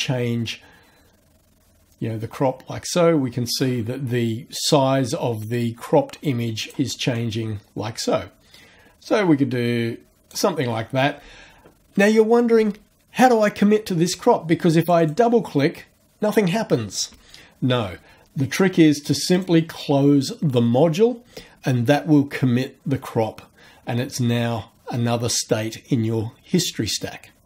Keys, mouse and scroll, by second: 7.2-10.5 drag, 14.8 click, 19.4 click.